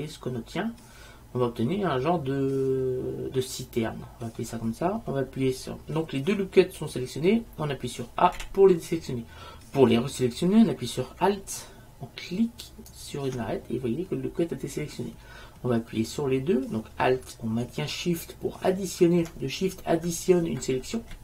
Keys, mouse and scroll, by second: 3.6-5.2 drag, 3.6-5.2 middle drag, 5.7-6.8 drag, 8.5 a, 12.8-14.8 right drag.